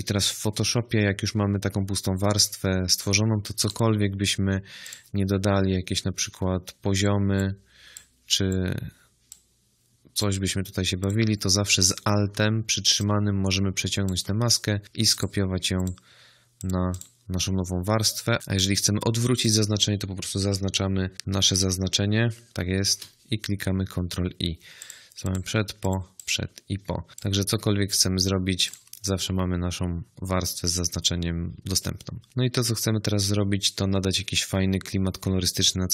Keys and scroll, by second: 22.8 ctrl+i.